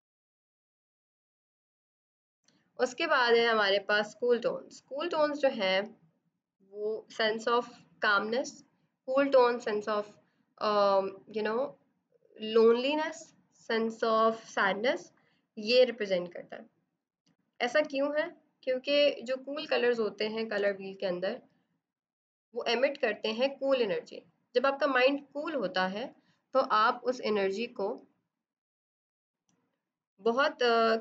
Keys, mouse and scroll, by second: 1.0 click, 17.3 click, 20.5 b, 22.0 right click, 23.0 click, 27.0 click, 30.2 click.